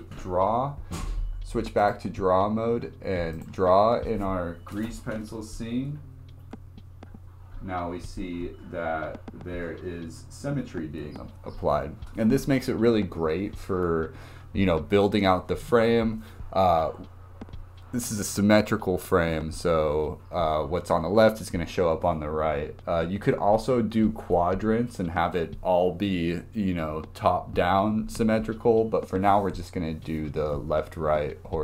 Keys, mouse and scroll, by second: 1.8-11.6 drag.